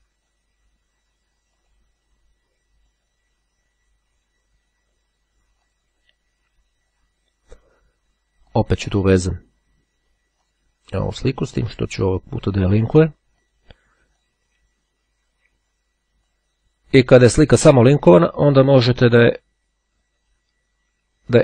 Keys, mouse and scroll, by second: 5.8 click, 8.5 click, 10.2 click, 11.3-12.3 drag, 12.9-14.1 drag, 14.3-16.0 drag, 16.4-17.7 ctrl+drag, 17.8-18.2 scroll up 2, 18.2-18.8 scroll down 2, 19.2 right click, 21.0-21.4 drag.